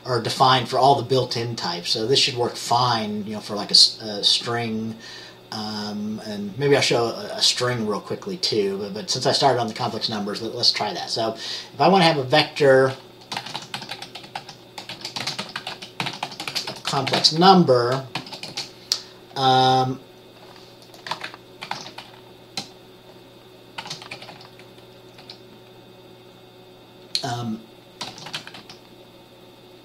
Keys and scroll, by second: 13.6-18.6 typing, 21.8 ctrl+x, 22.0 ctrl+f, 24.0-25.3 typing, 28.3-28.7 typing.